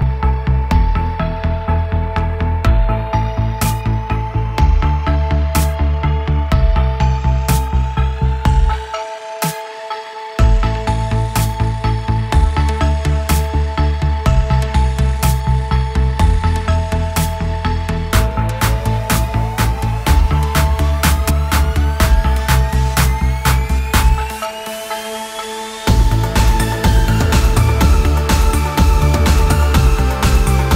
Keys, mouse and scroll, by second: 2.8 drag, 3.1 click, 3.8 click, 5.3 click, 5.9 click, 6.5 click, 6.8 click, 7.4 click, 8.8 Delete, 9.6 click, 10.9-12.4 middle drag, 12.4 click, 12.9 click, 15.1 click, 16.2-19.4 drag, 20.8-25.4 drag, 28.7-30.7 drag.